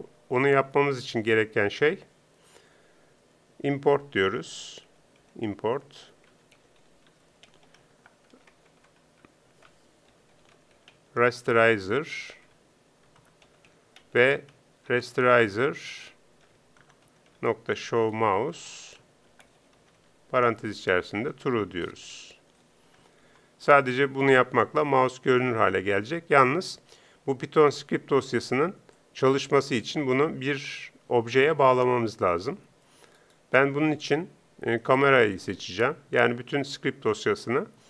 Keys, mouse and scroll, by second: 29.1 click.